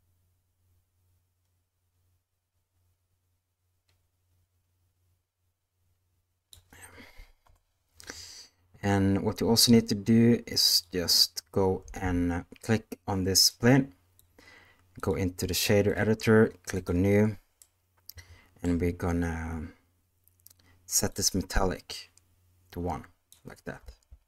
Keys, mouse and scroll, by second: 7.4 KP_0, 11.8 space, 13.4 click, 14.9-15.9 drag, 16.7 click, 17.5-18.6 middle drag, 21.2-23.2 drag, 23.8 space.